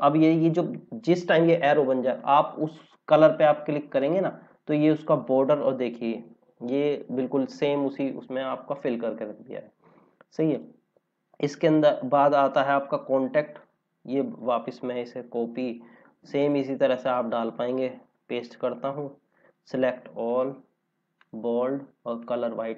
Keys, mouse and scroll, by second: 3.9 click, 8.1 scroll down 1, 13.5 click, 14.7 ctrl+c, 18.0 ctrl+v, 20.1 ctrl+a, 21.2 click.